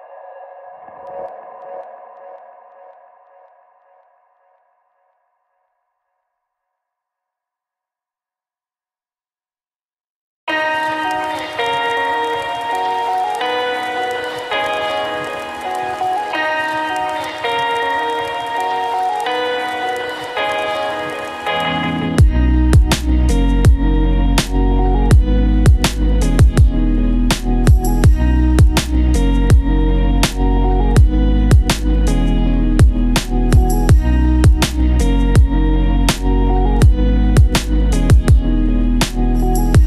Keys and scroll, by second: 8.6 ctrl+c, 9.9 ctrl+v, 33.4 ctrl+z.